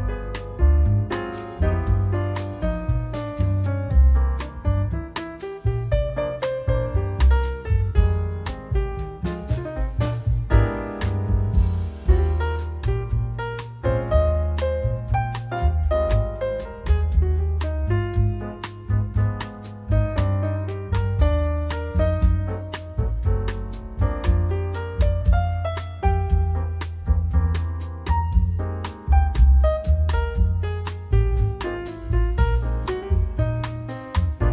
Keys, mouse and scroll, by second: 0.1-2.7 drag, 2.6 0, 4.4 click, 8.8 click, 10.4 click, 11.6 click, 14.0 click, 15.5 click, 16.3-17.3 scroll up 2, 19.0-19.7 drag, 20.1-21.0 typing, 23.1 click, 24.0 1, 24.5 click, 25.4 scroll up 2, 26.9 click, 28.5-30.6 drag, 31.4-31.8 scroll down 2, 31.9-32.2 scroll up 2, 33.0 click.